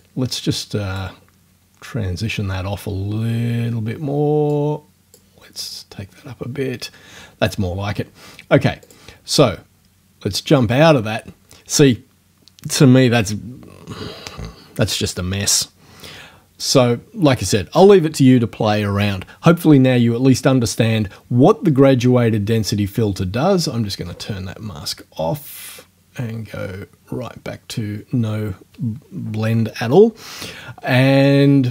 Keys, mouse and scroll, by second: 0.0 click, 4.5 click, 8.9 click.